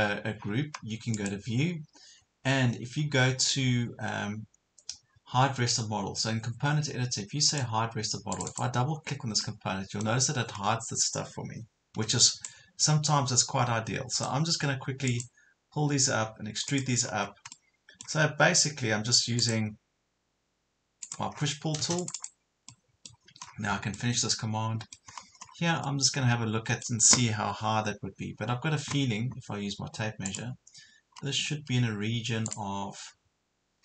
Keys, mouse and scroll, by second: 9.5 middle click, 10.5 scroll up 1, 11.9 p, 12.5-14.3 drag, 17.1 scroll down 1, 17.5 middle click, 19.4 click, 21.3 scroll down 1, 21.5 Escape, 22.0 click, 22.7 middle click, 23.5 scroll down 1, 24.0 middle click, 25.1 scroll up 1, 25.9-27.4 middle drag, 28.5 scroll up 1, 30.3 click, 31.1 scroll up 1, 32.5 click.